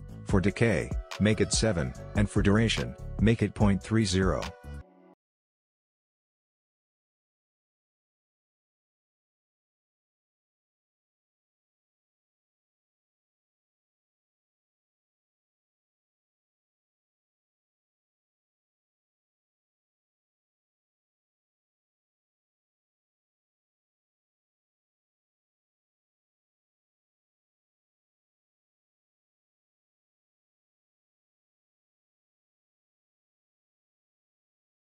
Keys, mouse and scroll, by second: 0.2 click, 0.6 Right, 2.8 click, 3.8 Right, 5.9 click, 9.0 space, 10.8-12.8 drag, 17.7 click, 21.8 Return, 22.6 click, 25.3 Return, 27.4 click, 30.2 click, 30.2 Return, 31.4 click, 34.0 Return, 34.8 click.